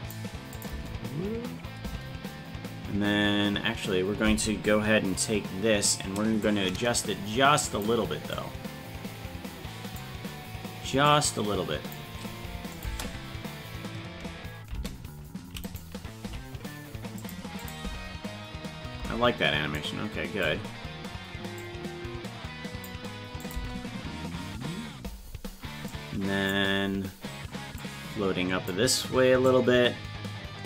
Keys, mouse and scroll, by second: 0.5 click, 0.7 space, 3.2 space, 6.4-7.8 drag, 8.3-9.9 drag, 11.0 click, 12.7 click, 12.8 space, 15.6 right click, 16.2 g, 17.6 click, 17.8 space, 19.7 click, 21.5-22.8 drag, 23.4 click, 23.5 space, 25.9 click, 27.7 click, 29.4-30.6 drag.